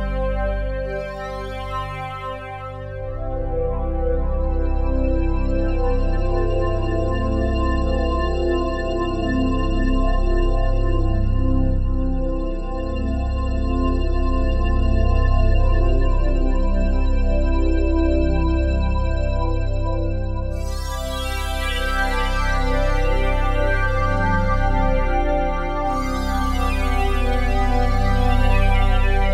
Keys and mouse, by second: 1.4-5.2 drag, 5.2 c, 5.5 h, 5.6 a, 5.7 r, 7.5 click, 7.5 typing, 8.3 click, 9.8 click, 10.8 ctrl+s, 11.1-11.8 typing, 13.1-23.6 ctrl+alt+drag, 13.1-13.9 typing, 24.8-29.3 drag.